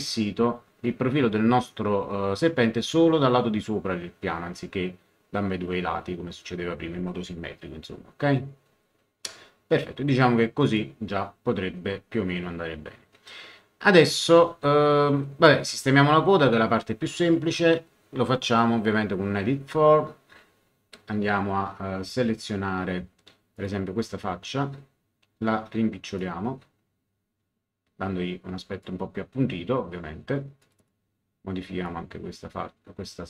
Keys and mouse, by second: 10.6 click, 18.5 click, 23.5 click, 26.1 click, 30.6 click, 31.8 click.